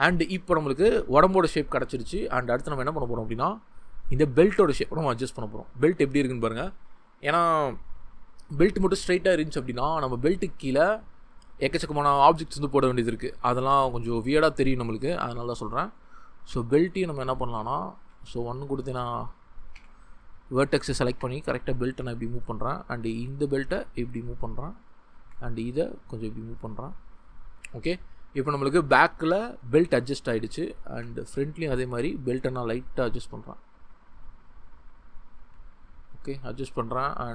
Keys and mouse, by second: 2.2-2.6 drag, 14.6 Tab, 16.4 g, 17.7 click, 18.1 ctrl+z, 18.5 1, 19.7 1, 21.1 g, 22.1 click, 23.1 g, 24.4 click, 26.2 click, 28.6 shift+click, 30.5 drag, 30.9 g, 35.4 g, 35.9 click, 36.3 Tab.